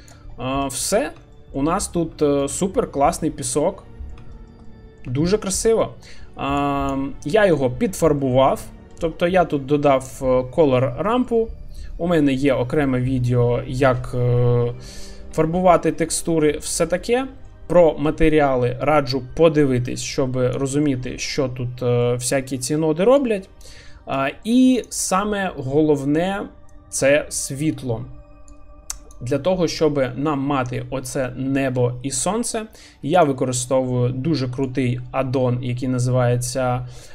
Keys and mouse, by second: 0.6 middle click, 1.3 shift+middle drag, 2.2 shift+middle drag, 3.6 middle click, 4.3 shift+middle click, 4.6 middle click, 5.2 shift+middle click, 5.5 middle drag, 6.6-21.3 drag, 23.4 click, 24.3 shift+middle click, 25.1-26.0 middle drag, 28.5 click, 29.8-31.8 middle drag, 34.8-37.1 drag.